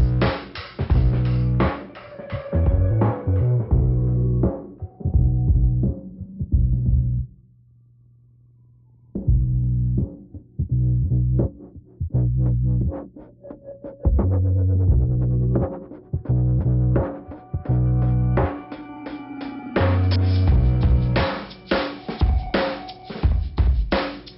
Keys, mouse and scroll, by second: 0.8 scroll up 1, 2.4 click, 4.9 click, 5.7 click, 6.6 click, 7.3 click, 9.7 click, 9.8 click, 10.1 click, 11.3 click, 12.1 scroll down 2, 14.0 middle click, 15.0 scroll up 1, 15.5 click, 18.4 scroll up 2, 19.9 scroll down 2.